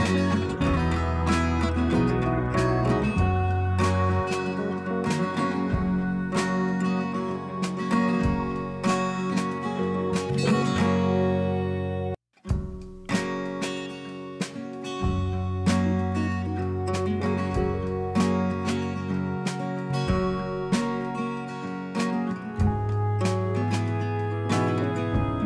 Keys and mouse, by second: 0.9 click, 1.5 click, 3.8 click, 6.7 click, 7.9 click, 9.7 click, 10.9 click, 12.9 click, 14.3 click, 15.0 click, 15.8 click, 17.3 click, 18.7 click, 22.5 click.